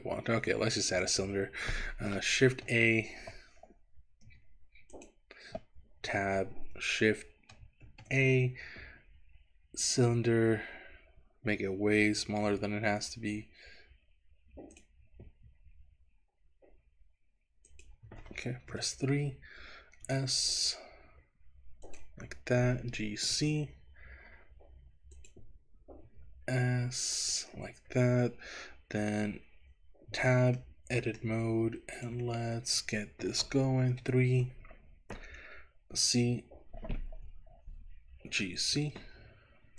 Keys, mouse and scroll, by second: 1.0 click, 2.6 shift+a, 6.2 Tab, 7.8 shift+a, 10.4-12.0 scroll down 3, 12.0 s, 14.9 click, 15.4 s, 17.7 click, 18.7 KP_3, 20.2 s, 21.9 click, 22.8 g, 23.3 z, 25.2 click, 26.1 s, 27.3 click, 30.1 Tab, 30.7 middle click, 32.0 click, 33.9 KP_3, 36.0 z, 38.4 g, 38.8 z.